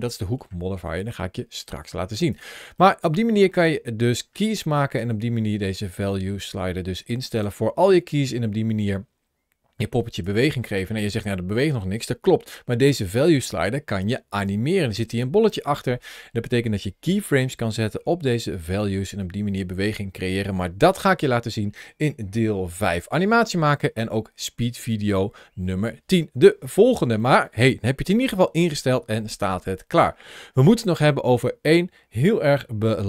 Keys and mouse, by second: 2.2 click, 2.7-4.0 middle drag, 4.8-6.8 drag, 7.2 click, 7.9-10.1 drag, 27.0-29.7 middle drag.